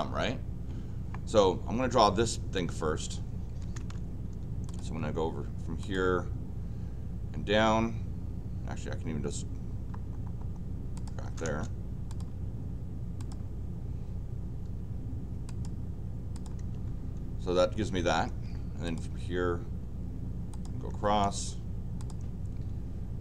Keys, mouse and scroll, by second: 3.5 l, 3.8 Return, 4.7 click, 5.8 click, 10.9 click, 11.2 Return, 11.4 Return, 12.1 click, 13.2 click, 15.5 click, 16.3 click, 16.4 click, 16.6 Return, 18.2 Return, 18.8 click, 20.5 click, 20.9 Return, 21.3 Return, 22.0 click.